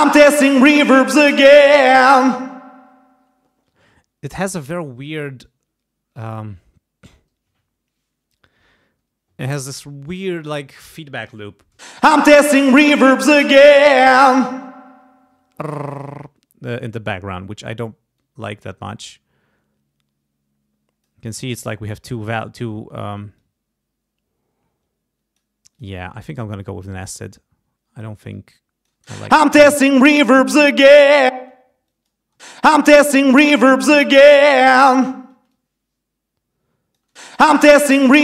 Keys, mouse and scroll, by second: 1.0 click, 3.7 space, 11.8 space, 16.1 space, 18.2-21.2 drag, 23.4-25.5 drag, 25.7 click, 26.6-28.2 drag, 28.3 click, 29.0 space, 31.3 space, 31.9 click, 32.4 space, 33.3-34.4 drag, 35.3 space, 35.5-37.1 drag, 37.1 space, 37.7 click.